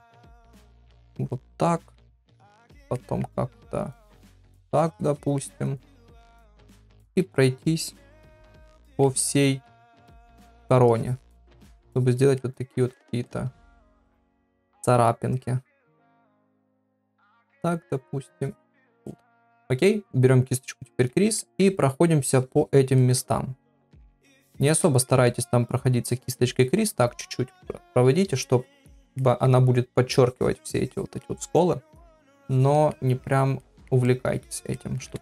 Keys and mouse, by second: 0.1 click, 0.9 click, 1.3 middle click, 2.4 middle click, 3.0 middle click, 3.9-5.2 drag, 5.4 middle click, 6.2 middle click, 7.0 shift+middle click, 7.6-8.9 drag, 9.1 middle click, 9.7 middle click, 10.9-12.1 drag, 12.4 middle click, 12.9 ctrl+middle click, 13.3 middle click, 13.7 middle click, 14.1 ctrl+middle click, 14.4 middle click, 15.7 click, 16.7 shift+middle click, 17.1 middle click, 18.2 click, 19.1 middle click, 21.0 click, 21.4 ctrl+middle click, 22.2 click, 23.0 middle click, 23.8 click, 24.5 ctrl+middle click, 24.8 middle click, 25.3 ctrl+middle click, 26.0-27.0 drag, 27.2 middle click, 28.2 click, 29.2 middle click, 30.2 click, 31.2 middle click, 32.1 click, 32.9 middle click, 33.6 middle click, 34.1 middle click, 34.8 middle click.